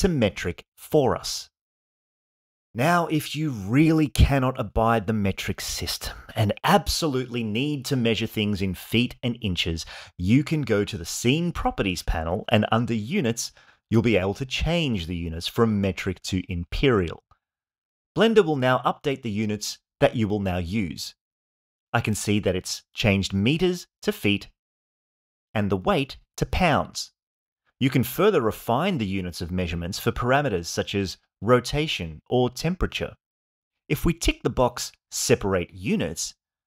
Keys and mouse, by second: 12.7 click, 13.3 click, 15.5-17.3 drag, 27.9-29.0 drag, 31.2-32.8 drag.